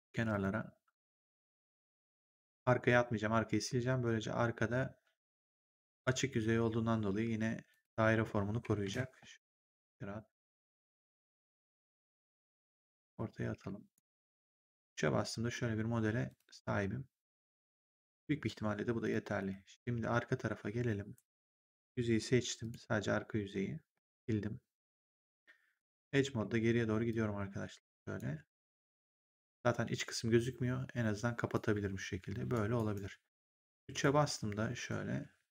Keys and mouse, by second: 0.2 ctrl+click, 1.7 ctrl+click, 7.6 ctrl+click, 8.7 ctrl+z, 9.7 ctrl+click, 12.9 ctrl+click, 13.4 w, 13.9 right click, 14.2 3, 16.2 click, 18.9 click, 19.3 ctrl+1, 21.1 right click, 21.5 click, 23.9 Delete, 24.8 right click, 25.7 click, 26.2 w, 27.0 click, 29.1 ctrl+1, 31.4 click, 32.7 right click, 33.9 right click, 35.1 3.